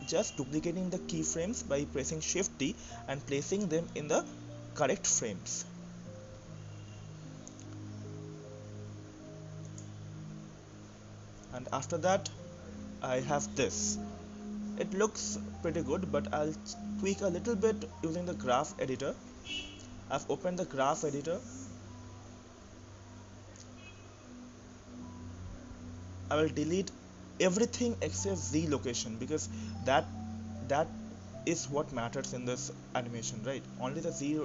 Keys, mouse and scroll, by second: 0.9 shift+d, 3.2-9.7 drag, 10.5-11.4 scroll down 2, 11.4-11.9 scroll up 4, 11.9-19.9 middle drag, 19.9-20.8 scroll up 6, 20.7-23.8 drag, 30.4 click, 31.3 click, 31.6 click, 33.0 click, 33.9 Delete.